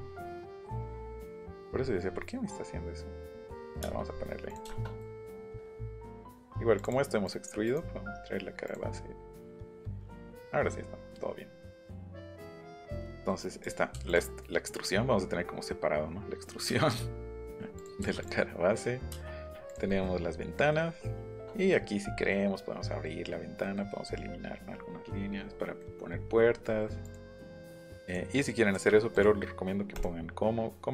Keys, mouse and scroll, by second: 1.5 click, 3.2 click, 3.5 middle click, 3.7 middle click, 3.9 middle click, 4.1 middle click, 4.5 click, 4.6 middle click, 5.2 click, 5.5 click, 6.0-6.5 scroll down 2, 6.8 click, 7.6 right click, 8.6 click, 9.6 middle click, 13.6 click, 14.1 click, 17.4 middle click, 17.8 click, 18.0 m, 18.2 click, 19.1 space, 19.6 click, 21.4 shift+middle click, 21.9 middle click, 23.6 middle click, 25.1-25.5 scroll down 1, 26.5 scroll up 1, 27.0 click, 27.8 click, 28.0 click, 28.3 scroll down 2, 29.1 click, 29.9 right click.